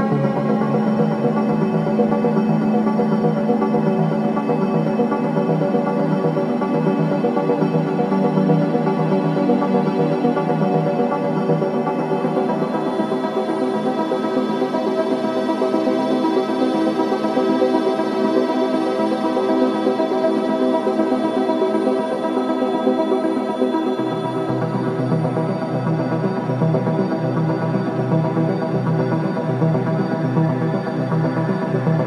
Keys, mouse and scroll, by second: 7.0 alt+Num_Lock, 7.6 alt+middle click, 8.3 alt+right click, 8.6 alt+middle click, 9.0 alt+right click, 11.8 alt+middle click, 12.2 alt+right click, 12.9 right click, 15.6 click, 16.2-16.5 scroll up 1, 17.1 alt+middle click, 18.5 click, 21.0 alt+middle click, 21.4 alt+right click, 21.7 alt+middle click, 22.6 alt+right click, 23.8 scroll up 1, 24.5 alt+middle click, 25.5 alt+click, 26.0 alt+middle click, 26.4 alt+right click, 27.5 alt+middle click, 28.0 alt+right click, 28.3 alt+middle click, 28.6 alt+right click, 29.1 alt+middle click, 31.1 q, 31.8-32.0 drag.